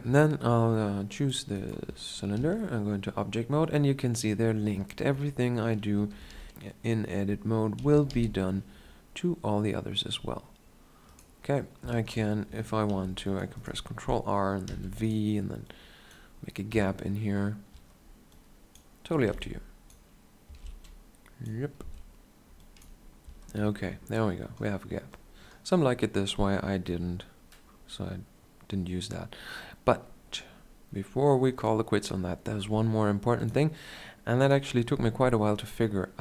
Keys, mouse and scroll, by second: 0.7-2.2 drag, 2.2 Tab, 5.8 s, 6.4 right click, 6.4 ,, 7.6 s, 11.1-12.7 right drag, 11.8-13.1 middle drag, 12.7 ctrl+r, 13.6 right click, 14.5 v, 15.5 click, 16.6 Tab, 17.6 Tab, 18.2-20.3 drag, 19.0 a, 19.1 b, 20.3 z, 21.6 z, 22.4-26.6 drag, 23.1 Tab, 26.7 KP_7, 33.2-34.3 drag, 34.3-36.2 middle drag.